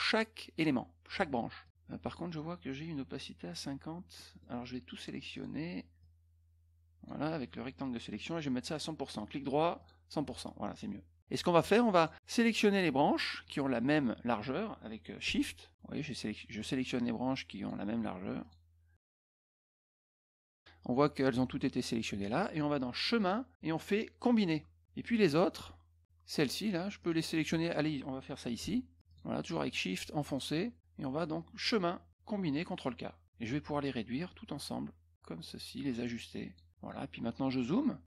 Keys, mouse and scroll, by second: 1.6 click, 2.0 click, 4.1 middle click, 5.3 click, 6.0-7.0 drag, 8.6 right click, 9.7 click, 11.9 click, 17.5 shift+click, 18.4 shift+click, 18.9 shift+click, 23.1 click, 24.3 click, 27.0 click, 28.9 shift+click, 29.0 shift+click, 29.7 shift+click, 30.2 shift+click, 31.6 click, 32.6 click, 34.2-36.5 drag, 37.4 middle click.